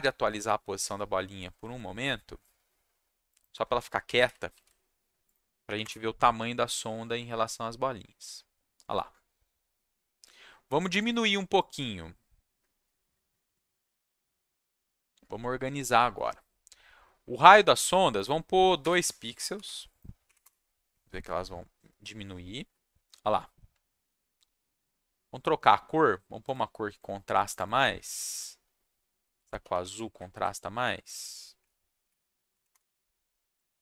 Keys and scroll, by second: 4.5 ctrl+s, 5.6 Up, 5.8 Return, 18.8 2, 19.5 ctrl+s, 20.2 Up, 20.4 Return, 29.1-30.3 typing, 31.5 Up, 32.0 Up, 32.5 Down, 32.7 Return.